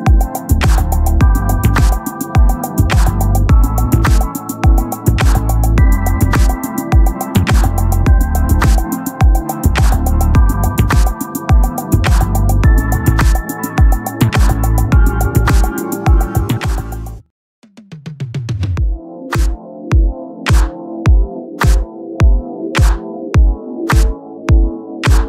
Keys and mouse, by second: 0.2 click, 5.5 click, 7.5 right click, 9.5 click, 11.9 click, 14.0 click.